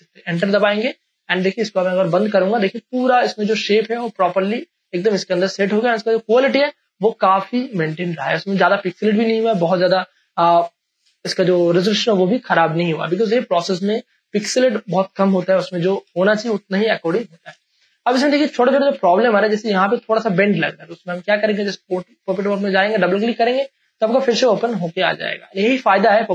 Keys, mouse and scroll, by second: 0.2 Return, 1.7 click, 2.3 space, 2.6 ctrl+click, 2.8 ctrl+space, 3.1 ctrl+space, 3.9 ctrl+space, 3.9 click, 5.9-10.4 ctrl+drag, 16.0 space, 16.2 click, 16.6 space, 17.0 ctrl+click, 18.1 space, 18.4 click, 18.7 space, 19.3 ctrl+click.